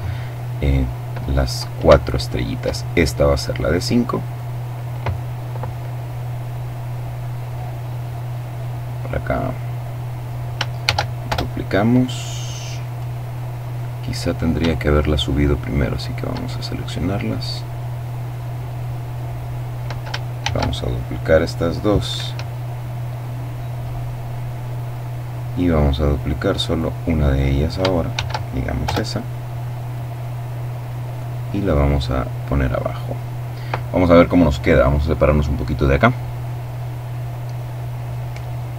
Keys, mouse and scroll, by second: 1.5-2.5 shift+drag, 2.5-3.7 shift+middle drag, 3.7 right click, 4.3 middle click, 8.1-10.2 drag, 10.2 shift+middle click, 10.3 shift+d, 10.7 shift+Return, 11.5-13.3 drag, 13.5-14.0 scroll up 1, 15.3 shift+right click, 16.4-19.4 drag, 19.8 shift+d, 21.6 Escape, 22.6-24.8 drag, 25.6 right click, 27.6 shift+d, 28.2 Return, 29.3-32.7 drag, 34.1-34.9 scroll down 2.